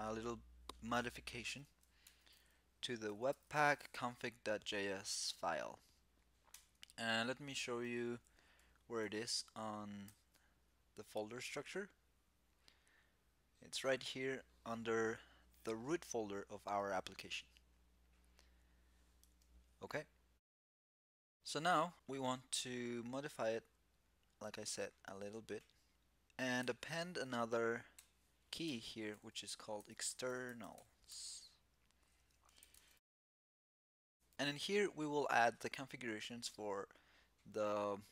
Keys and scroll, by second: 1.7 super+p, 9.8 shift+super+e, 32.8 alt+c.